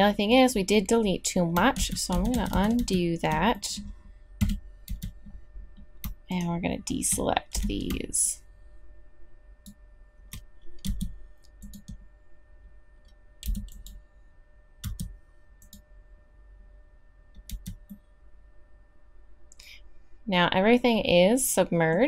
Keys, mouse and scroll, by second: 1.8 ctrl+z, 2.1 ctrl+z, 2.3 ctrl+z, 2.5 ctrl+z, 2.8 ctrl+z, 4.4 KP_3, 4.8 z, 7.5 b, 10.8 x, 13.4 b, 14.8 x, 17.5 z.